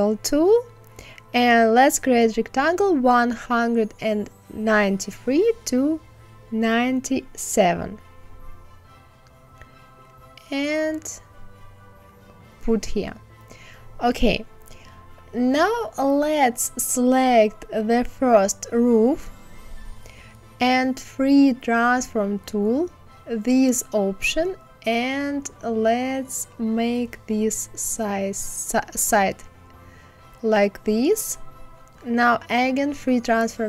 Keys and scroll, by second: 4.2 KP_9, 4.4 KP_7.